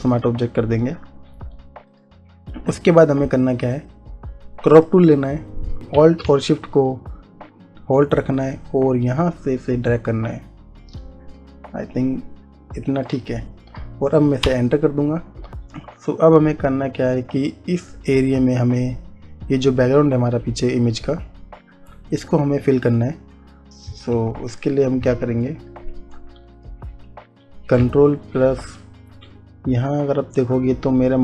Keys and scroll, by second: 14.7 Return, 24.8 ctrl+d.